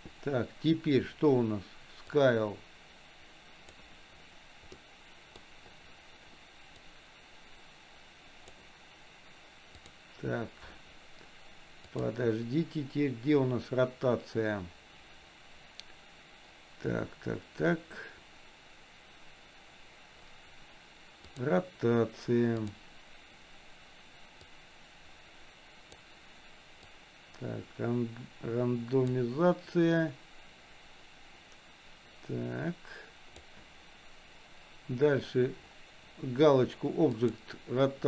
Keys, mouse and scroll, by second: 2.2-3.8 drag, 4.9 middle click, 6.8-9.0 drag, 9.8 click, 12.0 click, 21.8 click, 24.5-26.7 drag, 27.1-29.4 drag, 30.2-33.7 drag, 37.3 click.